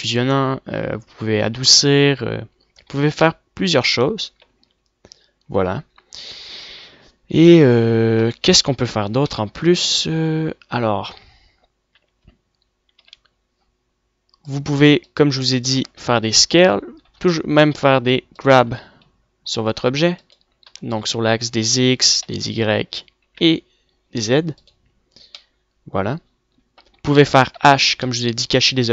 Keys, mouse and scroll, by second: 4.0 middle click, 4.8 Tab, 5.6-8.0 middle drag, 10.0 middle click, 10.9 w, 12.6 Tab, 13.6 a, 16.2 middle click, 16.7 s, 17.5 g, 19.1 g, 21.5 g, 22.8-24.3 middle drag, 25.1 click, 25.8 middle click, 26.8-28.0 middle drag, 28.0 h.